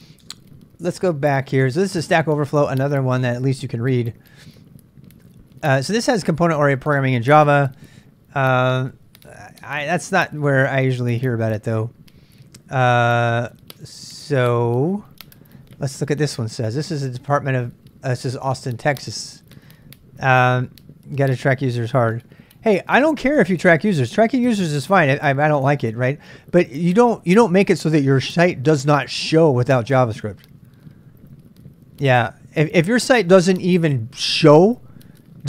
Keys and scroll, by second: 1.0 space, 8.8 typing, 9.9 j.